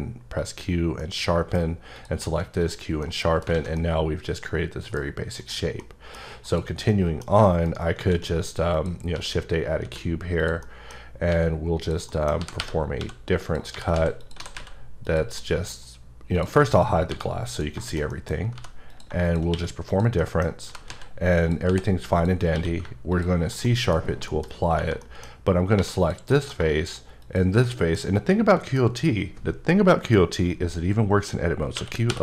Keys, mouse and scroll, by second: 0.4 click, 1.0 middle click, 1.5 scroll up 1, 1.9 click, 2.3 q, 2.6 click, 3.0 middle click, 3.5 alt+a, 3.8 middle click, 5.4 click, 5.8 middle click, 6.4 click, 6.9 middle click, 7.7 shift+right click, 8.0 shift+a, 8.7 click, 9.1 s, 9.8 z, 10.4 click, 10.6 middle click, 11.0-11.3 scroll up 2, 11.3 g, 11.8 click, 12.1 middle click, 12.4-14.5 typing, 13.4 click, 14.2 click, 15.0 click, 15.4 middle click, 15.7 scroll down 2, 16.4 click, 17.1 h, 17.5 click, 17.8 shift+middle click, 18.6 g, 18.9 click, 19.5 q, 19.9 click, 20.2 middle click, 20.5 scroll up 1, 20.6 g, 20.9 z, 21.4 click, 21.7 h, 22.1 click, 22.5 q, 23.1 ctrl+click, 23.6 middle click, 24.5 scroll up 2, 25.0 middle click, 25.8 3, 26.0 click, 26.3 middle click, 27.2 shift+click, 27.7 middle click, 28.3 middle click, 31.7-32.2 typing.